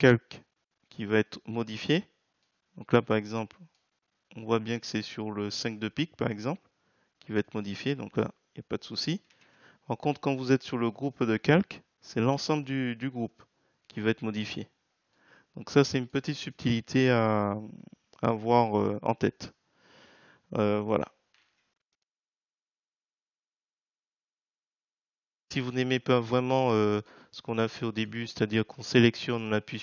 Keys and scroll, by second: 9.3 ctrl+z, 21.4 ctrl+z.